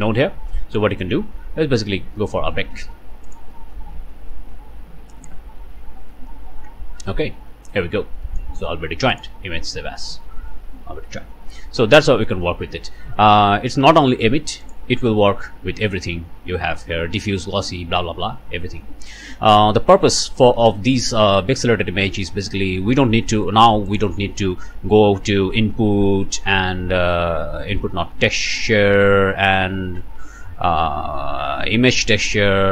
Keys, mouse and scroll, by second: 1.4 scroll up 1, 1.8-2.4 scroll down 2, 3.3 click, 7.3 middle click, 7.8 click, 8.2 click, 9.1 click, 10.0 click, 10.7 KP_Enter, 11.7 middle click, 12.0 middle click, 12.1-12.7 scroll up 2, 13.8 scroll up 1, 14.6 click, 19.0 scroll up 2, 20.1 scroll down 2, 21.8 scroll down 2, 22.4 scroll up 1, 22.7 click, 23.1-23.4 scroll up 1, 23.5 middle click, 23.9 middle click, 23.9 shift+click, 24.3 shift+a, 31.9 click.